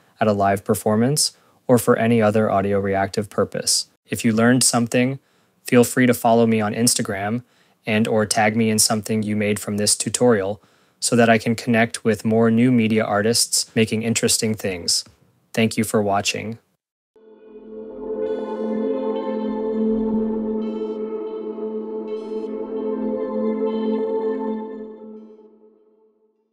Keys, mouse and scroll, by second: 0.7 click, 0.7 click, 2.9 scroll, 3.5 click, 3.8 click.